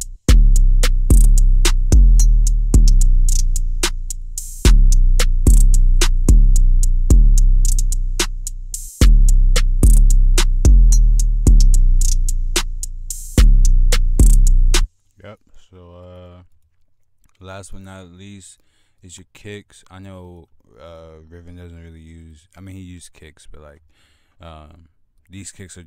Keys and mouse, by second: 2.6 click, 2.8 click, 5.4 F1, 5.4-6.0 drag, 6.3 F1, 6.3 click, 6.9 click, 10.4 click, 11.3 click, 11.5 click, 11.7 F1, 11.7 click, 15.1 click, 17.0 click, 17.2 F1, 17.2 click, 18.7 click, 20.0 click, 24.8 F1, 24.8-25.8 drag.